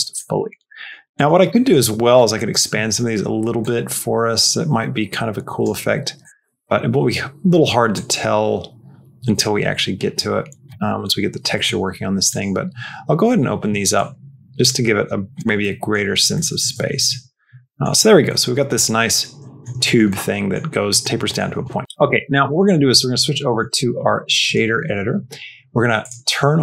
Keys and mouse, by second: 0.6 middle click, 1.4 middle click, 3.6-5.5 drag, 7.8-10.5 drag, 10.7 middle click, 12.1 click, 13.9-15.2 drag, 15.6 middle click, 16.3 middle click, 16.6 Tab, 17.0 middle click, 18.3-19.5 middle drag, 19.7 shift+middle click, 20.1 middle click, 20.7 middle click, 21.2 middle click, 23.4-24.4 drag, 26.2 click.